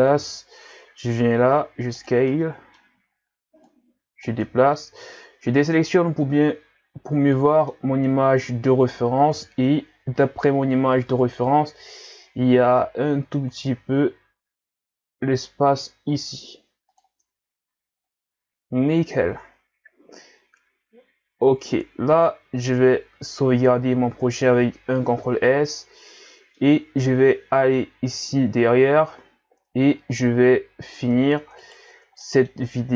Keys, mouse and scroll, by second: 0.2 KP_1, 1.5 s, 2.3-3.7 middle drag, 3.7 click, 4.5 Tab, 6.4-6.8 scroll up 1, 7.3-9.4 middle drag, 9.4 KP_1, 11.1 Tab, 11.7 s, 17.3 Tab, 17.7 a, 17.9-18.5 scroll down 5, 23.1 ctrl+s, 26.6-29.2 middle drag, 29.2-30.3 scroll up 4, 31.0 Tab, 31.4 Tab, 31.6 right click, 31.9 Tab, 32.2 middle click, 32.8 scroll down 1.